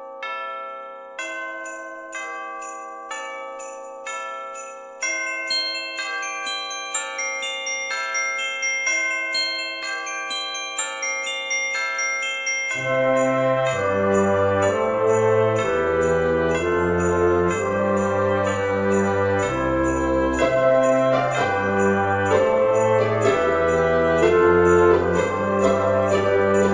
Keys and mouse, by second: 0.4 click, 1.0 shift+middle click, 1.9 click, 2.6 alt+shift+click, 5.7 shift+d, 6.8 right click, 7.3 p, 7.6 click, 8.8 Tab, 9.7 click, 10.3 Caps_Lock, 10.8 middle click, 11.8 Tab, 12.3 a, 13.6 alt+e, 14.4 click, 18.8 click, 19.4 middle click, 20.5 click, 21.0 alt+shift+click, 22.1 middle click, 22.7 e, 24.8 z, 25.7 click, 26.2 Tab.